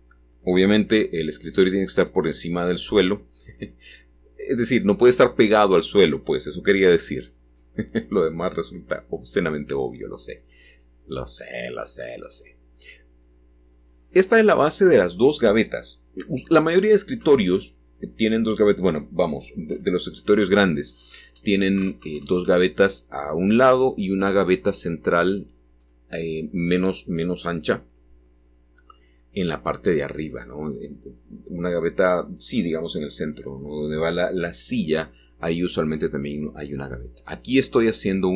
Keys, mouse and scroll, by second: 1.5 click, 4.0 s, 6.7-9.3 drag, 11.7 click, 13.2 g, 15.9 click, 16.5-19.6 shift+middle drag, 20.6 3, 22.4-23.5 drag, 23.7 g, 26.1 click, 27.0-28.4 middle drag, 28.4-29.1 scroll up 1, 29.1 click, 30.7 i, 37.2 b.